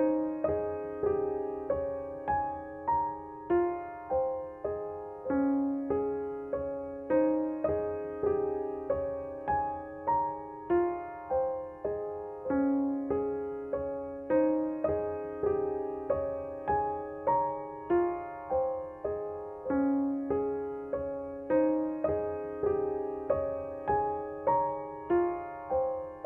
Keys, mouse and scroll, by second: 9.4 ctrl+Num_Lock, 10.4 ctrl+d, 13.9 F7, 15.6 click, 18.6 click, 20.6 ctrl+=, 22.2 t, 23.2-26.0 alt+drag, 26.0 ctrl+z.